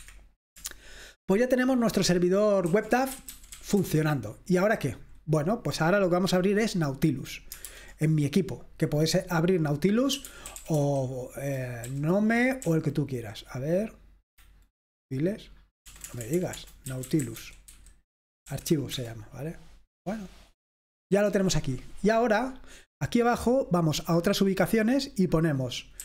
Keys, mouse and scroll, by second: 0.0 Escape, 0.2 click, 2.5-5.0 typing, 7.7 alt+space, 10.0-12.7 typing, 15.9-18.2 typing, 18.5 Down, 18.9 Return, 24.0 click, 25.5 click.